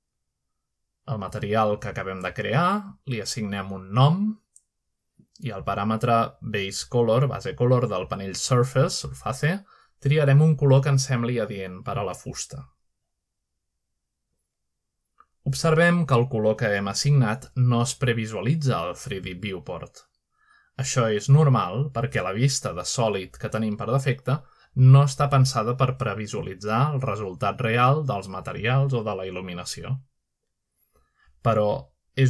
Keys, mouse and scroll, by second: 0.0 click, 4.2-6.2 drag, 4.2-5.8 scroll up 1, 6.5 click, 7.6-8.2 typing, 8.6 Return, 11.7 click, 13.1-16.3 drag, 18.0-19.1 drag, 19.8-20.8 drag, 24.3-24.9 shift+middle drag, 27.3 z, 29.7 right click.